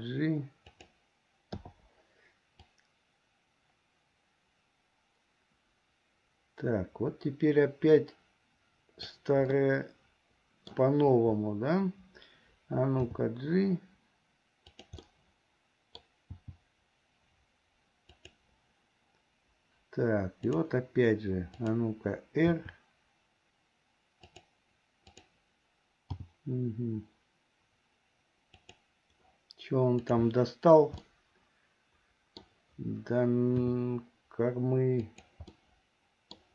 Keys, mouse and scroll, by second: 1.8 i, 2.9-9.3 drag, 9.7-10.9 middle drag, 13.2 g, 15.2-16.2 middle drag, 16.5 g, 22.7 r, 25.2 click, 26.4 g, 30.2 click, 31.2-32.6 middle drag, 33.7 r, 35.7 middle click.